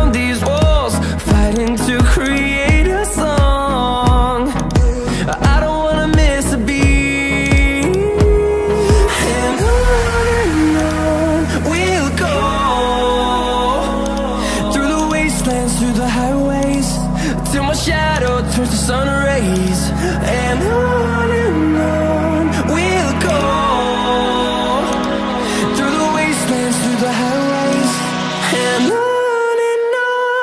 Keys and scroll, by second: 9.2 ctrl+z.